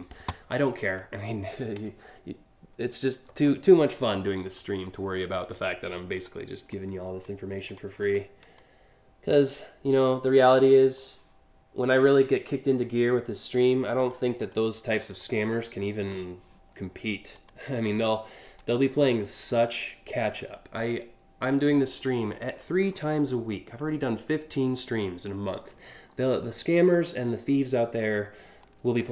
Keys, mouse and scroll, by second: 0.4 scroll down 2, 1.5 alt+scroll down 2, 4.1 scroll up 1, 4.7 alt+scroll up 1, 5.8 click, 6.4 click, 7.3 click, 7.6 click, 8.2-10.6 drag, 11.6-13.2 drag, 13.6 click, 14.0 click, 14.5 click, 14.8 click, 17.0 click, 18.2 click, 19.8-20.2 scroll down 3, 21.1-22.7 scroll down 6, 25.7-26.3 scroll up 5, 26.9 scroll up 1.